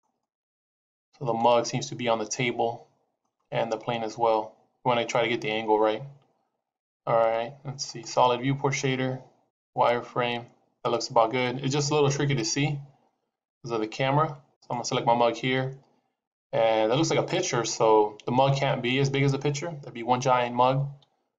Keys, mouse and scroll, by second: 0.1 shift+middle click, 8.1 click, 9.5 click, 14.4 click, 20.5 s.